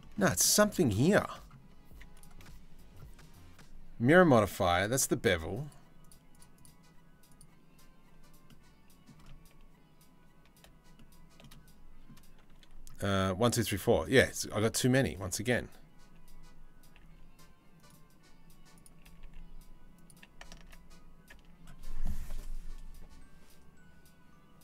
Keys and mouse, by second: 0.1-1.8 shift+middle drag, 10.6-11.7 shift+middle drag, 14.3 2, 14.7 1, 16.6 g, 18.4 click, 18.7 g, 20.2 Tab, 20.9 Tab.